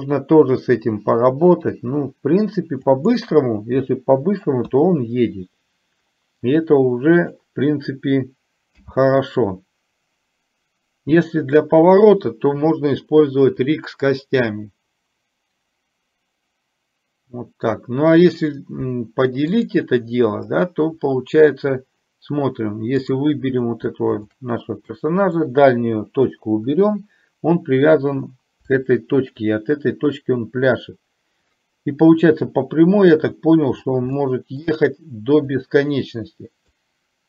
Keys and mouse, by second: 6.9 click, 19.8 click, 23.1 click, 24.3 shift+click, 25.0-25.5 drag, 29.0 shift+middle drag, 34.3 shift+middle click, 35.6 click, 36.9-37.2 drag.